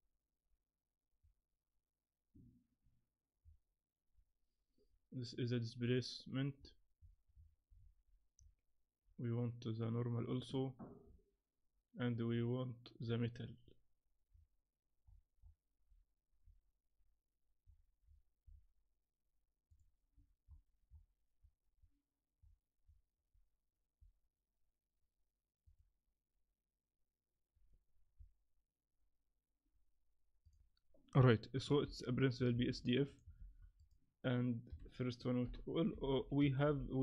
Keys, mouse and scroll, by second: 30.6 shift+middle click, 30.6 scroll up 3, 32.8 click, 33.1 click, 33.4 shift+a.